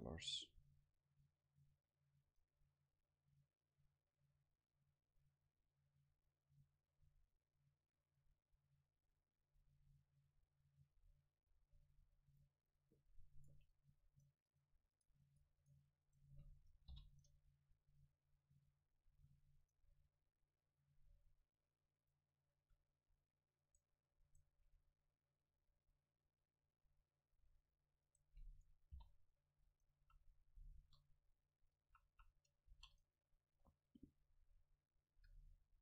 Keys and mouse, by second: 12.4-14.8 middle drag, 13.8-18.8 right drag, 16.9 ctrl+l, 19.2 a, 19.7-22.0 right drag, 20.8-22.6 drag, 22.6 a, 23.6-26.0 right drag, 28.1-29.8 right drag, 29.0 ctrl+l, 30.0 a, 30.8 KP_0, 31.9 a, 32.1 a, 32.7 ctrl+s.